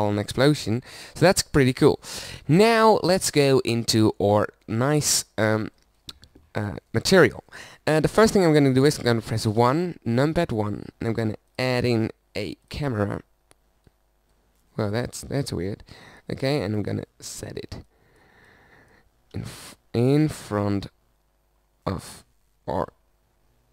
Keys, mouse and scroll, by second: 1.3 middle click, 9.6 KP_1, 15.4 click, 19.3 KP_0, 20.3 KP_0.